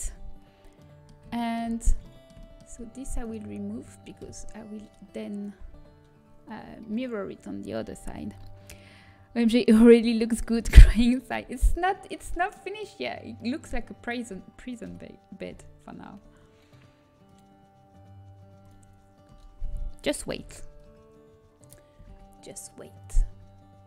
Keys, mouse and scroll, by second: 4.5 Delete, 11.0-14.7 middle drag, 14.8 KP_1, 20.2 z, 20.2 b, 21.9 g.